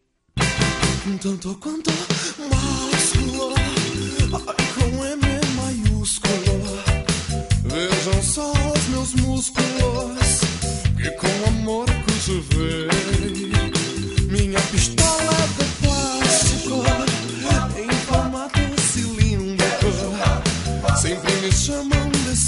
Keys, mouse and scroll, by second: 0.5 Tab, 1.1 middle click, 2.1 middle click, 3.3 click, 5.1 click, 7.2 click, 8.7 click, 11.8 click, 12.5 click, 13.0 click, 15.3 click, 20.7 middle click.